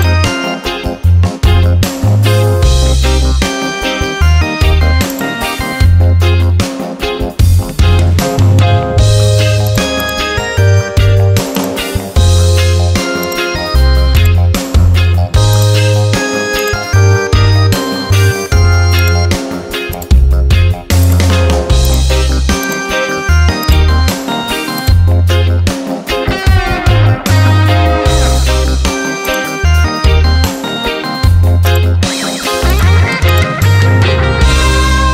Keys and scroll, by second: 4.1 Return, 29.7 ctrl+a, 34.2 ctrl+d.